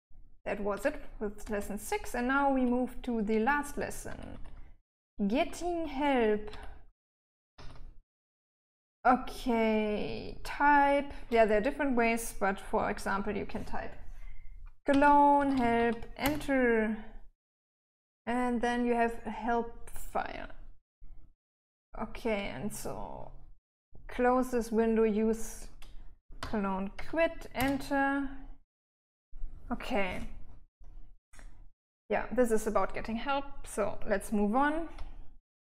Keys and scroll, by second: 0.0 j, 1.1-7.8 typing, 8.9 j, 14.9-16.6 typing, 26.7-27.3 typing, 27.9 Return.